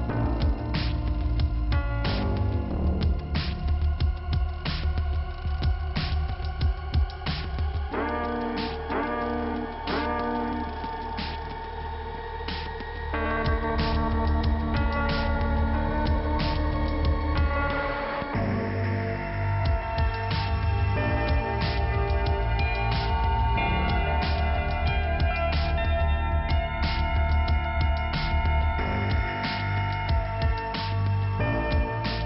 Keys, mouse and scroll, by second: 1.4 click, 3.4 click, 3.5 click, 4.4 click, 7.6 click, 8.4-8.9 scroll up 1, 9.1 click, 9.8 click, 10.9 click, 11.0 click, 11.4 click, 13.7 click, 14.1 click, 15.5 click, 16.5 click, 19.4-20.5 scroll down 1, 20.6 k, 22.0 middle click, 22.9 click, 25.6 click, 27.2 click, 27.3 click, 27.6 click, 27.7 double click, 28.7 double click, 29.1 click, 31.4 click, 31.5 click, 31.9 click.